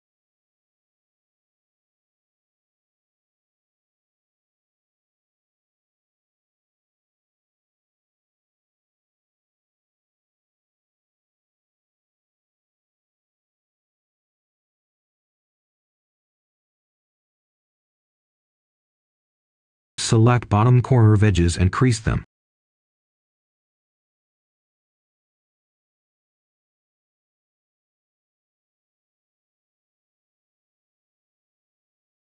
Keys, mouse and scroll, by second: 0.0 right click, 0.9 ctrl+shift+click, 1.4-1.9 scroll down 1, 1.9 right click, 3.8 ctrl+shift+click, 4.2 right click, 5.8 ctrl+shift+click, 6.2 right click, 8.0 ctrl+shift+click, 8.3 right click, 9.8 ctrl+shift+click, 10.1 right click, 11.9 ctrl+shift+click, 12.2 right click, 13.5 ctrl+shift+click, 13.9 right click, 15.7 ctrl+shift+click, 16.1 right click, 17.6 ctrl+shift+click, 18.1 right click, 20.3 typing, 21.9 Return, 22.8 Escape, 23.5 click, 23.8 Tab, 24.1-27.1 right drag, 27.1-28.4 scroll down 1, 28.4-28.9 scroll up 1, 28.9 right click, 29.5 Tab.